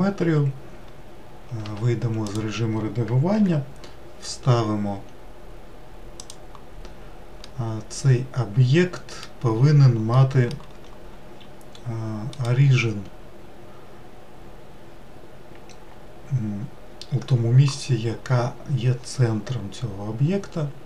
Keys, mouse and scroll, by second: 1.6 Tab, 2.3 click, 3.4 g, 7.5-12.3 middle drag, 12.3-15.5 right drag.